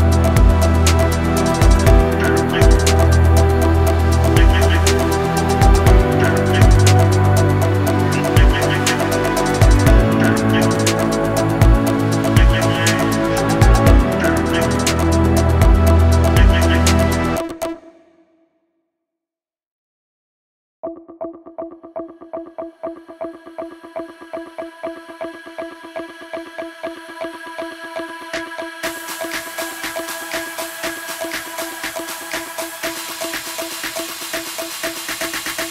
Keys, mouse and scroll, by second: 0.6 i, 1.9 click, 3.1-3.6 drag, 7.2 g, 8.8 r, 10.9-11.4 drag, 13.3 g, 14.2 r, 15.7-16.1 drag, 17.0 r, 18.4 g, 20.1-20.5 drag, 21.1 g, 22.4 r, 25.8-26.3 drag, 27.1 g, 28.2 r, 30.1 scroll down 1, 31.3-32.0 scroll down 3, 32.0-32.3 drag, 32.5-35.7 typing, 34.2 click, 34.8 click.